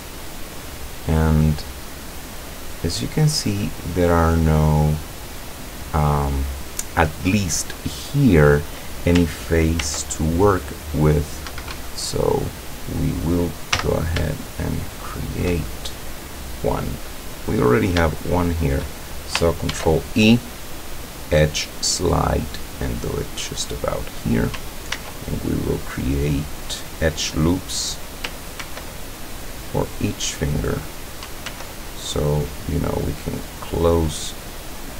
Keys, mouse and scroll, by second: 0.3-1.3 scroll down 2, 1.3 scroll up 2, 2.3 scroll down 2, 9.8 ctrl+r, 11.5 Escape, 12.1-13.4 drag, 13.8 z, 14.3 shift+click, 15.8 shift+scroll down 1, 16.8 right click, 17.6 right click, 18.4 shift+right click, 19.7 ctrl+e, 21.7 click, 24.0 click, 25.0 ctrl+r, 26.2 click, 27.9 click, 28.6 ctrl+r, 29.1 ctrl+click, 30.8 click, 31.5 ctrl+r, 33.4 click.